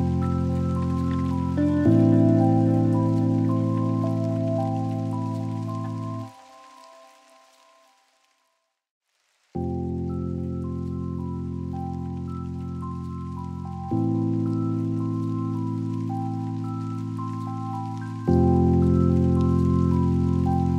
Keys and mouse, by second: 7.1 click, 8.0-11.2 drag, 12.7 click, 14.4 click, 16.3 click, 17.5-19.1 drag, 20.0-20.7 drag.